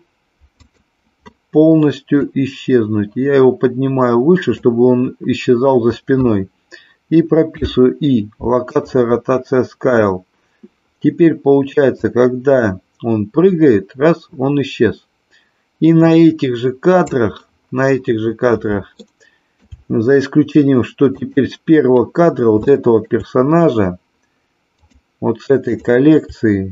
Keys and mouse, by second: 0.5 click, 2.1-4.6 drag, 7.4 |, 12.0-17.0 drag, 18.9 shift+middle click, 21.1 click, 22.8-23.1 shift+middle drag, 24.6 click, 25.6 click.